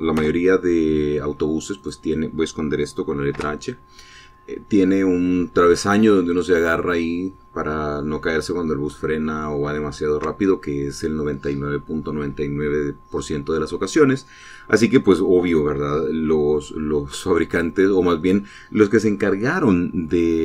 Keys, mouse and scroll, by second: 0.9 h, 2.5 click, 4.0 h, 6.0 middle click, 9.2-9.6 scroll up 3, 9.7-11.0 shift+middle drag, 11.1-15.6 shift+scroll down 3.